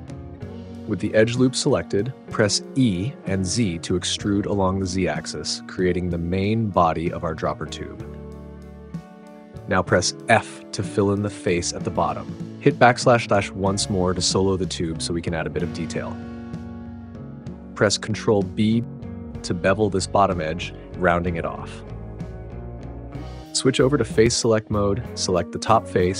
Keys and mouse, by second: 3.3 e, 4.0 z, 10.2 f, 12.5 /, 16.3 alt+z, 19.0 ctrl+b, 22.3 click, 23.7 click.